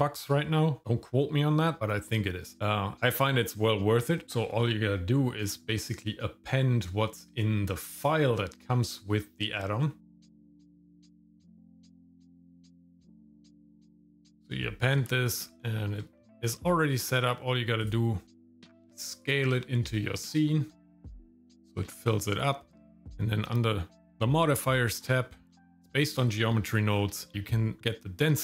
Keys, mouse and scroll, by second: 5.8-10.6 drag, 15.1 shift+middle click, 15.2 shift+scroll down 1, 15.6 shift+middle click, 16.2 middle click, 16.6 shift+middle click, 17.3 scroll down 1, 17.8 click, 18.2 middle click, 18.2 s, 19.6 shift+middle click, 20.7 shift+middle click, 20.9 scroll down 1, 21.1 g, 21.4 shift+middle click, 22.0 scroll up 1, 23.0 click, 25.0-26.0 scroll down 3, 26.9-27.3 scroll up 4.